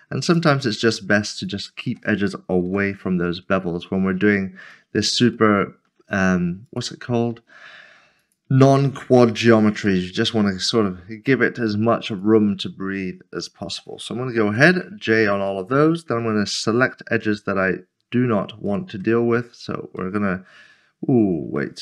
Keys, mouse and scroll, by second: 0.2 click, 0.7 s, 1.4 shift+click, 2.7 j, 3.0 scroll down 1, 3.9-4.4 scroll up 1, 4.7 scroll up 1, 4.9 middle click, 5.5 shift+middle click, 6.7 shift+middle click, 6.9 click, 7.3 s, 8.2 shift+click, 9.4 j, 9.9 middle click, 12.1 click, 13.4 shift+click, 15.1 j, 15.1 middle click, 16.1 2, 16.9 click, 18.7 shift+click, 19.9 shift+click, 20.2 middle click.